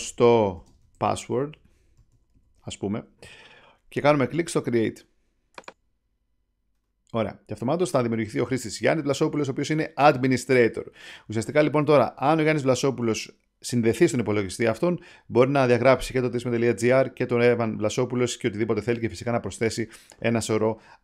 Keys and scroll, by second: 0.0-3.1 typing.